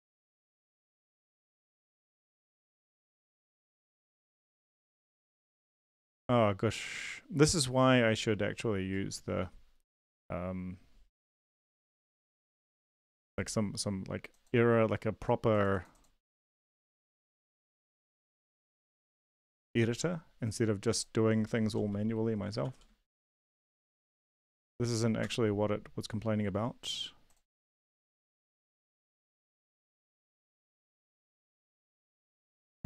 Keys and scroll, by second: 17.8 shift+Up, 17.9 shift+Up, 18.1 shift+Up, 18.7 Down, 22.6 ctrl+s, 25.4 Return, 30.4 BackSpace, 30.7 ctrl+s.